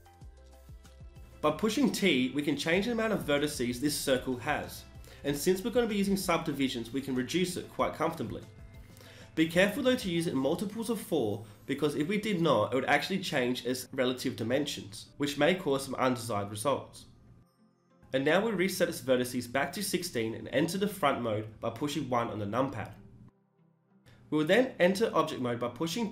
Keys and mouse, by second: 0.8 t, 2.2-3.6 drag, 4.9-6.7 middle drag, 6.7 n, 11.1-12.9 drag, 13.1-17.4 drag, 19.9 n, 20.0 t, 21.2 KP_1, 24.2 Tab, 24.6 s.